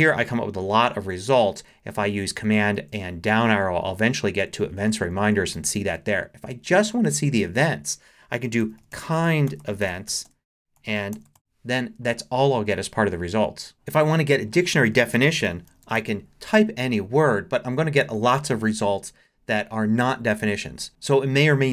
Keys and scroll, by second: 1.8 super+Down, 4.4 Down, 4.9 Up, 5.5 Down, 7.4 super+a, 8.4-11.8 typing, 14.9-16.4 typing.